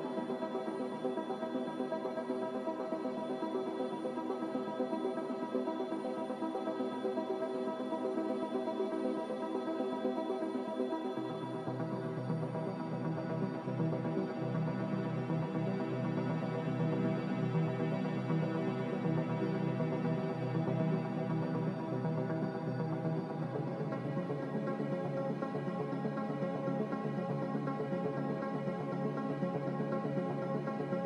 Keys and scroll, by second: 4.0-5.1 typing, 15.0-16.3 typing, 19.6 b, 30.8-31.0 typing.